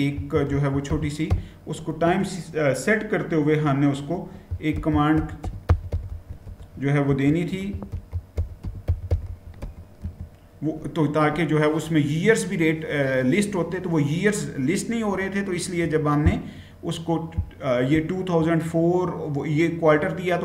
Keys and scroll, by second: 0.0-1.8 typing, 4.0-9.9 typing.